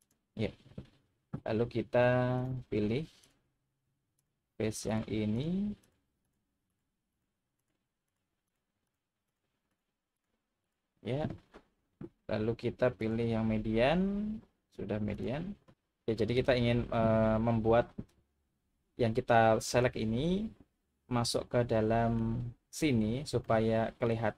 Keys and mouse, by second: 0.0 click, 2.4 click, 4.9 shift+click, 6.2 shift+click, 6.7 shift+click, 7.1 shift+click, 7.6 shift+click, 9.2 shift+click, 10.7 shift+click, 13.1-15.2 drag, 15.7 middle click, 21.3 middle click, 23.5-24.0 middle drag.